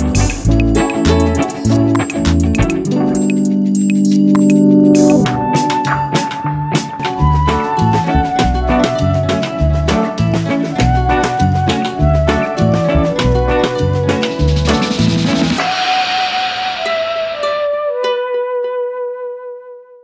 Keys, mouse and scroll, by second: 1.2 scroll down 2, 1.8-4.4 scroll up 2.